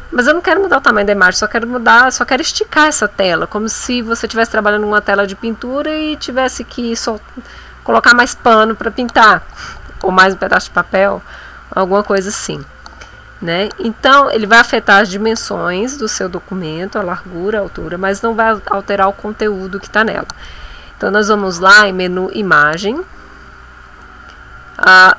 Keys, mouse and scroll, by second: 22.4 click.